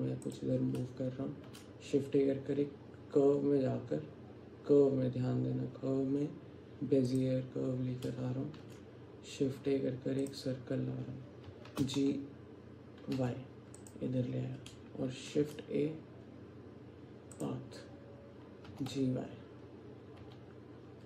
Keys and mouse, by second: 1.5 shift+a, 8.7 shift+a, 11.5 g, 15.4 shift+a, 18.7 g.